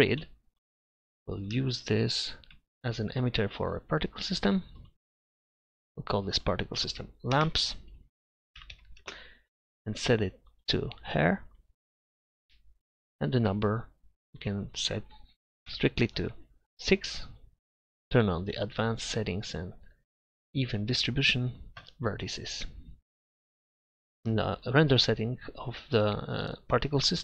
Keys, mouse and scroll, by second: 1.5-2.1 middle drag, 2.7 middle click, 9.0-10.5 middle drag, 13.4 middle click, 17.3-18.4 middle drag, 24.0 middle click.